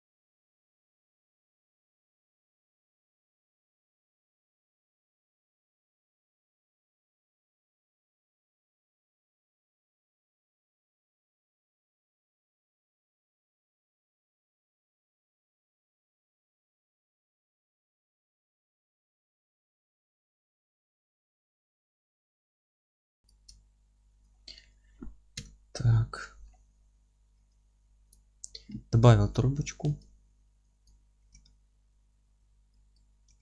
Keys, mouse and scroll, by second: 1.5 shift+a, 1.6 scroll down 2, 1.8 s, 5.8 click, 5.9 scroll up 1, 6.1 s, 6.4 click, 6.6 middle click, 6.8 s, 7.3 click, 7.4-8.1 scroll up 2, 7.5 s, 7.8 click, 8.1-8.5 scroll down 1, 8.5-9.5 alt+middle drag, 9.0 scroll up 1, 9.2 s, 9.5 click, 10.1 alt+middle click, 10.5 s, 11.0 click, 11.1-12.8 middle drag, 11.6 ctrl+a, 11.8 scroll up 1, 12.5 g, 12.8 click, 12.9-15.6 middle drag, 13.0 r, 13.9 Return, 14.7 g, 15.6 click, 15.8-17.0 alt+middle drag, 15.9 scroll up 1, 16.2 Tab, 16.5 F3, 17.0-19.2 drag, 17.2 g, 18.1 alt+z, 18.8 g, 19.2 F3, 19.4 scroll up 1, 19.7 g, 20.0 click, 20.0 scroll down 1, 20.1 alt+middle click, 20.5 click, 20.6 scroll up 1, 20.7 alt+middle click, 21.0 F3, 21.2 click, 21.4 scroll up 1, 21.5 g, 22.2 scroll down 1, 22.4 alt+middle click, 22.5 Tab, 22.6 scroll up 1, 22.8 g, 23.3 click, 23.6-28.1 alt+middle drag, 24.3 scroll down 2, 25.4 KP_7, 26.1-26.8 scroll up 2, 27.0 scroll up 2, 27.3 g, 28.1 click, 28.3-28.9 scroll down 2, 28.9 scroll down 1, 28.9-30.0 middle drag, 29.2 Tab, 29.5-30.0 scroll up 2, 30.0-33.4 drag, 31.0 scroll up 2, 31.2 g, 33.2 g.